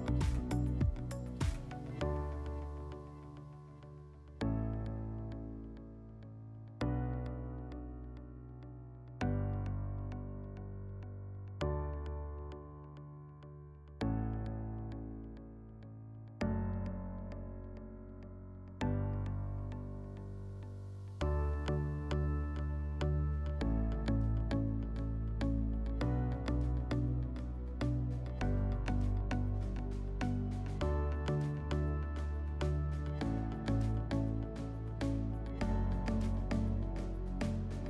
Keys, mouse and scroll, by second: 0.2 click, 1.5 click, 3.1 click, 18.5 click, 19.5 click, 20.6 click, 27.8 click, 31.5 click, 33.1 click, 34.3 click.